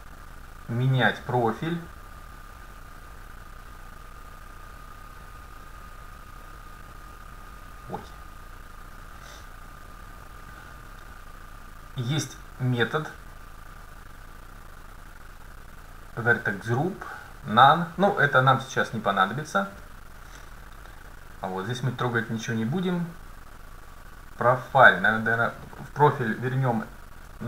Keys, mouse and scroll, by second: 7.0-10.6 drag, 13.1-18.8 drag, 19.9 middle click, 22.9-26.9 drag.